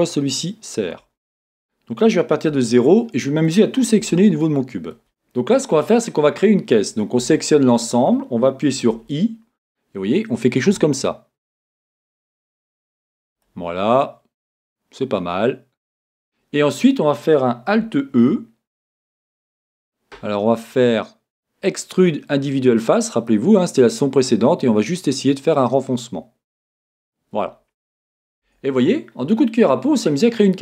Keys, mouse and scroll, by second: 1.0 z, 2.5 a, 3.5-4.0 scroll up 2, 4.0 a, 13.4 click, 13.9-26.9 middle drag, 26.9 click, 28.4 Tab, 28.8-30.6 middle drag.